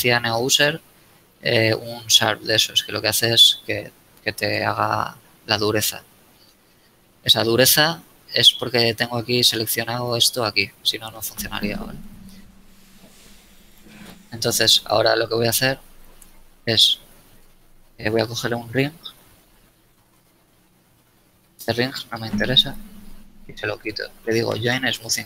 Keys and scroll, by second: 6.2 Tab, 12.3 Tab, 17.1 alt+a, 17.5 alt+Tab, 18.5 ctrl+Tab, 19.2 ctrl+Tab.